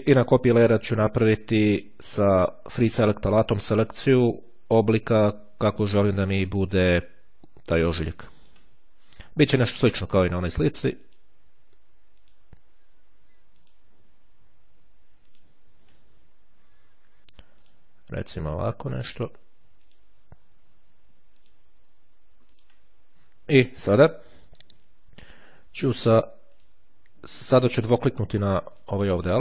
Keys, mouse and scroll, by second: 4.6-9.1 drag, 10.3-11.8 drag, 12.1 click, 13.8 click, 15.2 click, 16.3-16.9 ctrl+scroll up 2, 17.5-19.5 drag, 19.5 middle click, 19.8 click, 21.6 click, 22.3-27.3 drag, 28.9 click.